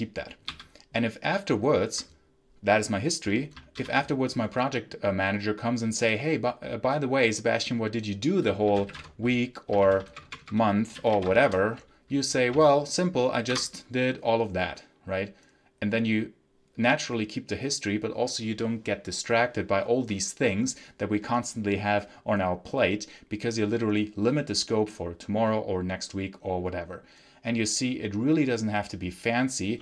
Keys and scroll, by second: 0.4 ctrl+q, 3.6 ctrl+l, 8.3-12.4 typing, 9.7 ctrl+t, 13.5 Return.